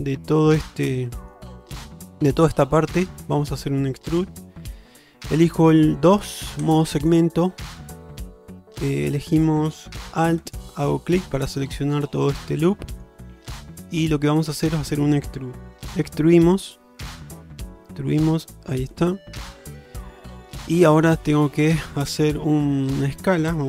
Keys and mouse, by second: 0.6 middle click, 1.7 shift+middle click, 6.7 2, 10.5 alt+click, 11.5-13.1 middle drag, 13.6 shift+middle click, 14.7 shift+middle click, 16.2 e, 19.5-21.0 middle drag.